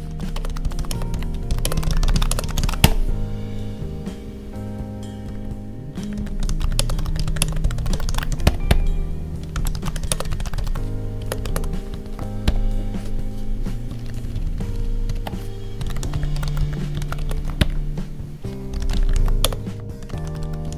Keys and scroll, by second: 0.3 space, 0.8 space, 1.6 space, 2.3 space, 6.7 space, 7.3 space, 11.1 space, 11.4 space, 14.0 ctrl+Down, 17.1 space, 19.4 space, 20.7 ctrl+s.